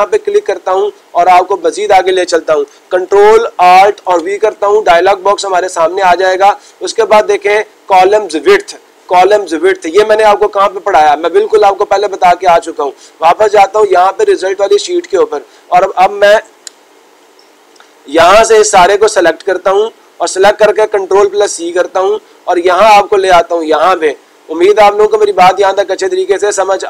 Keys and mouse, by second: 0.3 click, 1.6-2.6 drag, 12.0-13.0 drag, 13.9-15.0 drag, 15.1-16.2 drag, 20.2-21.3 drag, 23.5-24.5 drag.